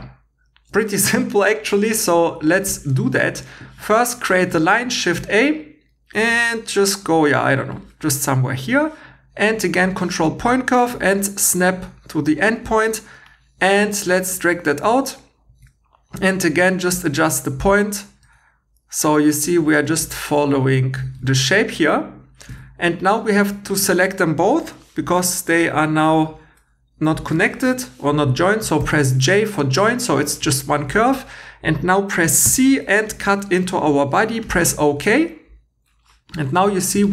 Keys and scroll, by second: 15.5 1, 18.3 2, 19.9 1, 21.2 2, 32.4 c, 36.5 Tab.